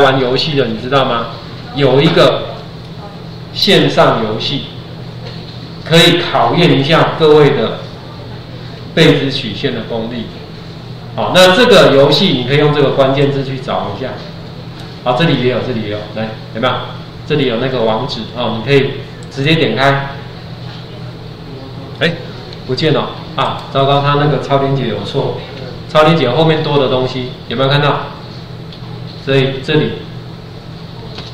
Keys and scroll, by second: 26.6 ctrl+4.